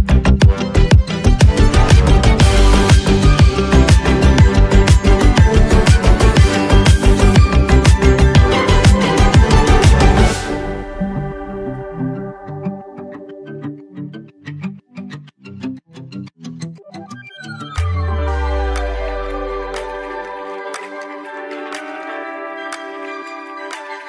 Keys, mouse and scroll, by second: 1.2 x, 1.9 click, 9.2 space, 9.3 click, 21.0-21.4 alt+scroll down 1, 22.3-22.6 scroll down 1.